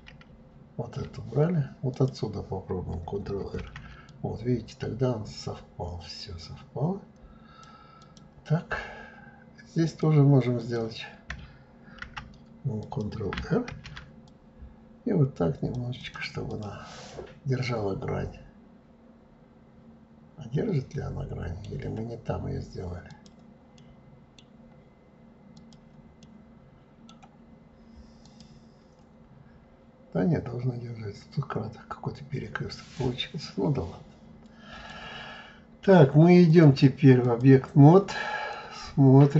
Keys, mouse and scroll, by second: 1.9 click, 3.6 ctrl+r, 9.8 click, 10.6 click, 12.0 ctrl+t, 12.8 click, 13.7 ctrl+r, 16.5 click, 17.1-20.1 middle drag, 23.1 click, 23.8-25.5 middle drag, 25.5 click, 26.2-28.2 middle drag, 28.2 click, 29.2-30.8 scroll up 2, 31.5-33.0 scroll down 5, 33.0-36.0 middle drag, 36.5-38.5 drag, 38.5-39.3 middle drag.